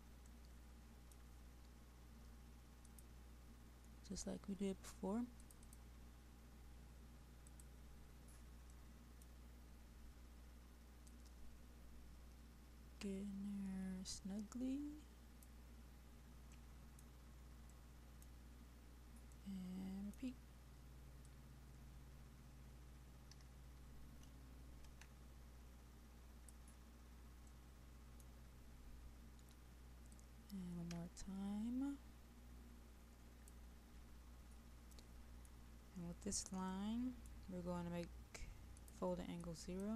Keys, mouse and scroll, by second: 0.3 middle click, 2.9 click, 8.9 middle click, 9.7-11.1 scroll down 1, 11.1-15.5 drag, 16.6 middle click, 17.2-17.7 scroll up 1, 17.7-20.5 middle drag, 21.3-26.5 drag, 27.5 middle click, 30.2-33.5 drag, 35.0 middle click, 35.8-36.8 scroll up 1, 36.8 middle click.